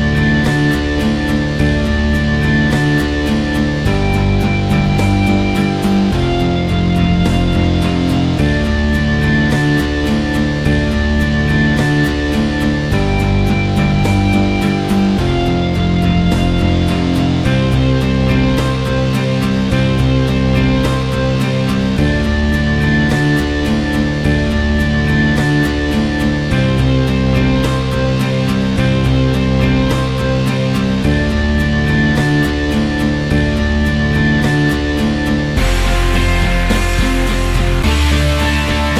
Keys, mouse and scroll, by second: 0.0 click, 0.1 middle click, 0.7 n, 1.1 click, 1.9 ctrl+z, 2.0-3.7 drag, 3.7 ctrl+z, 3.8-6.4 drag, 6.4-7.5 middle drag, 7.6 click, 9.5 click, 9.6 middle click, 9.9 f, 10.1-10.5 right drag, 10.5-11.4 scroll down 13, 11.4 click, 11.6-12.0 scroll up 8, 12.0 f, 12.5 click, 12.9 ctrl+z, 13.1-14.0 scroll down 6, 14.3 click, 14.9 ctrl+z, 15.0 right click, 15.5 middle click, 15.7 click, 16.5 ctrl+z, 16.7 ctrl+z, 16.8 right click, 17.4-21.6 drag, 21.6 f, 21.8 right click, 22.4 click, 23.2 right click, 24.1 click, 24.5 ctrl+z, 24.6 right click, 25.4 click, 26.1 ctrl+z, 26.8-31.0 drag, 31.2 middle click, 31.3 scroll up 4, 31.5 middle click, 32.0-32.9 drag, 32.9-33.2 scroll down 1, 33.2-33.6 drag, 33.6 ctrl+alt+s, 34.4 middle drag, 34.6-35.0 drag, 35.0 middle click, 35.8 click, 35.9 middle click, 36.1 t, 36.2 scroll up 1, 36.4 f, 36.6 click, 37.4 middle click, 37.5 click, 37.7 middle click, 37.8 click, 38.5 middle click, 38.6 click.